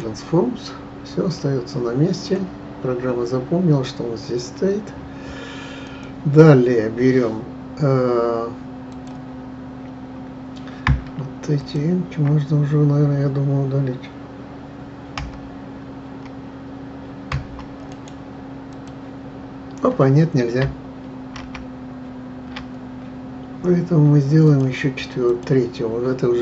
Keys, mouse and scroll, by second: 1.3-4.4 middle drag, 5.8-9.0 drag, 11.6 shift+click, 15.1 Delete, 17.3 Delete, 17.9-21.4 right drag, 21.4 ctrl+z, 24.4 click, 25.2 click.